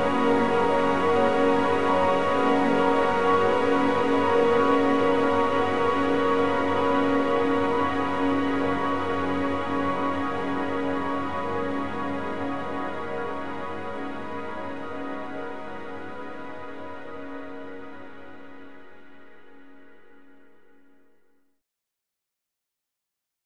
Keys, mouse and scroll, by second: 1.0 click, 1.8 g, 4.0 a, 4.2 a, 6.0 click, 6.8 middle click, 7.5-8.2 scroll up 1, 8.2-10.0 drag, 10.9-13.5 drag, 18.9 click, 21.2 a, 21.4 a.